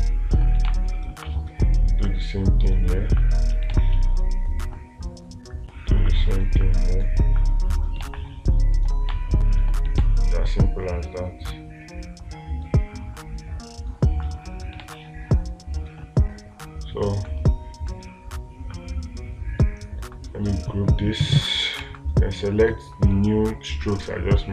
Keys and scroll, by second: 0.2 space, 1.1 space, 4.2 space, 10.5 space, 15.3 space.